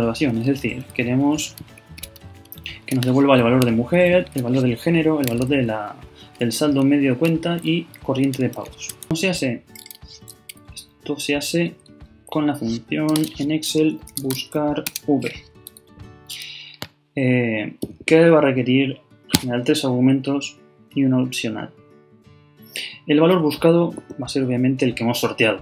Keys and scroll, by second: 1.8 shift+Up, 9.0 alt+Left, 12.9 shift+Right, 13.1 shift+0, 14.0 shift+b.